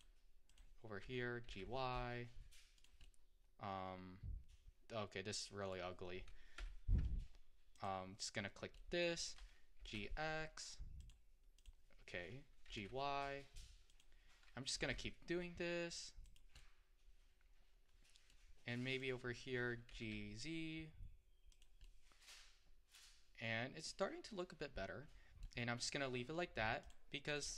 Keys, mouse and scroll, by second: 0.5 click, 1.5 g, 3.1-6.2 middle drag, 6.6 3, 7.8 click, 8.8 middle click, 9.8 g, 11.6 click, 12.7 g, 14.8 g, 16.7-18.9 middle drag, 18.9 click, 19.9 g, 21.9-26.9 middle drag, 26.9-27.5 drag.